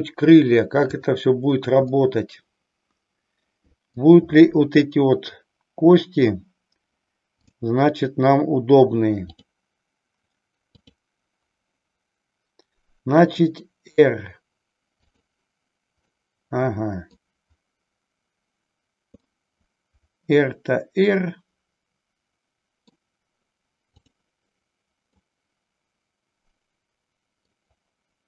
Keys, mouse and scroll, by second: 1.0 click, 2.0-4.1 middle drag, 10.8 click, 13.2 r, 15.2 click, 16.1-17.2 middle drag, 19.2-23.0 middle drag, 24.0-24.7 drag, 25.3-27.7 middle drag.